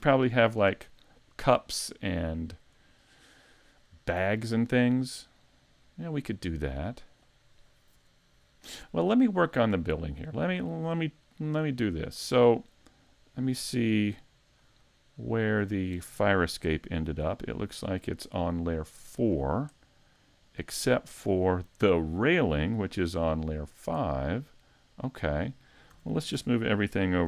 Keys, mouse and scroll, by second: 0.0 a, 4.7-5.2 scroll up 3, 5.2 shift+middle click, 6.9-8.0 scroll down 1, 10.2 right click, 11.4 right click, 12.3 right click, 15.4 right click, 17.8 click, 18.3-18.6 scroll down 3, 19.3 middle click, 21.0 click, 22.7 shift+middle click, 23.4 middle click, 24.9 click, 26.1 a, 26.3 a.